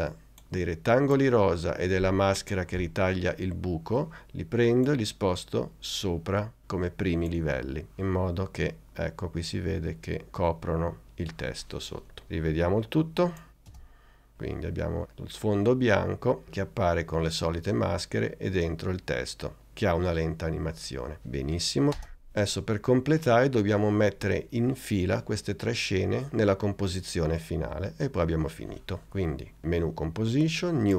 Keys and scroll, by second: 13.8 space, 22.1 space.